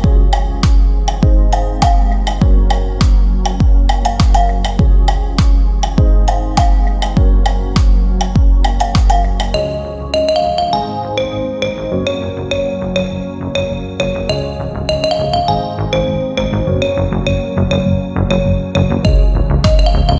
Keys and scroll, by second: 0.0 ctrl+z, 4.7 shift+F2, 5.0 Escape, 12.9 F3, 13.2 Escape, 14.1 shift+F2.